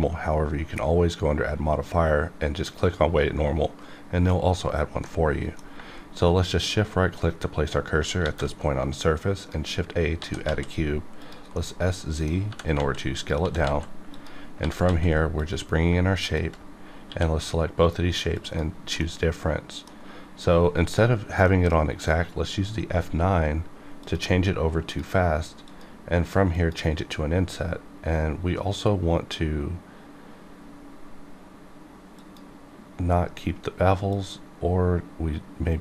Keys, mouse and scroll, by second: 5.0-6.6 middle drag, 6.6 shift+right click, 7.9 shift+right click, 8.2 shift+a, 9.4 click, 10.2 s, 10.4 z, 11.2 click, 11.5 middle click, 12.2 scroll down 1, 12.5-14.8 typing, 13.2 click, 14.1 click, 15.4 click, 16.2 shift+click, 17.1 q, 18.3 click, 19.0 middle click, 20.0-21.4 scroll up 1, 21.4 F9, 24.0 click, 25.2 click, 26.7 click, 32.2 click.